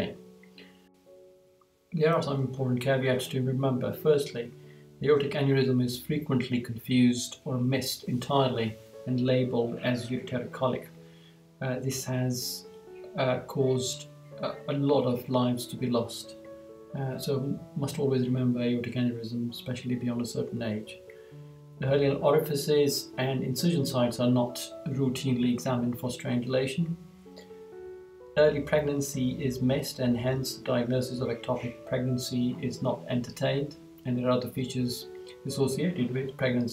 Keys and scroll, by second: 4.1 Right, 20.6 Right, 22.5 Right, 27.1 Right.